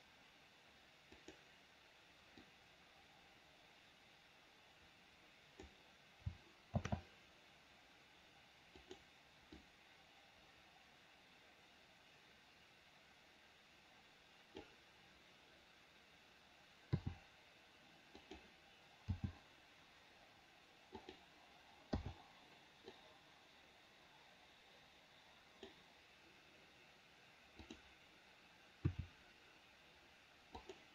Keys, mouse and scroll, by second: 2.7-6.0 drag, 7.1 shift+d, 9.8-14.9 drag, 17.1 r, 19.3 g, 22.2 i, 23.2-26.0 drag, 29.0 r.